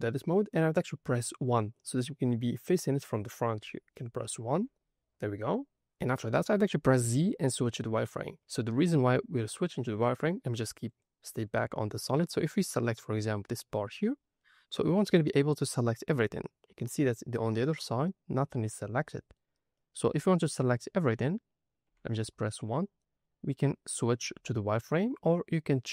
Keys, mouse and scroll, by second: 1.2 middle click, 4.4 KP_1, 5.7 scroll up 1, 7.0 z, 12.2 click, 14.3 middle click, 16.4 scroll down 2, 16.9 middle click, 18.6 middle click, 19.7-21.8 middle drag, 21.8 KP_1, 24.1 z.